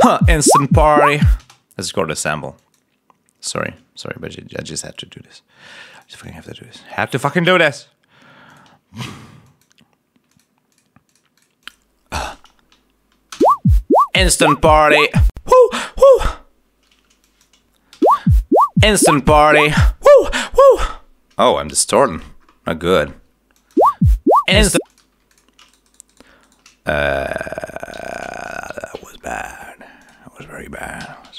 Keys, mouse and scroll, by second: 1.0 click, 1.3 space, 2.5 click, 3.5 click, 4.1 scroll down 1, 4.9 right click, 5.9 click, 6.9-7.3 scroll down 1, 7.5 scroll up 1, 8.4 click, 9.4 click, 10.2 click, 10.7 click, 11.0 click, 11.6 click, 13.3 shift+space, 16.1 space, 17.1 click, 17.8 shift+space, 20.9 space, 21.6 g, 22.0 click, 22.4 click, 23.4 click, 23.7 space, 24.6 space, 24.8 click, 25.0 s, 25.2 click, 25.6 shift+right click, 26.3 shift+right click, 26.9 shift+right click, 27.8 g, 27.9 shift+click, 28.6 ctrl+shift+scroll down 3, 28.9-29.3 ctrl+scroll up 2, 29.3 scroll down 2, 29.9 click, 30.9 alt+d.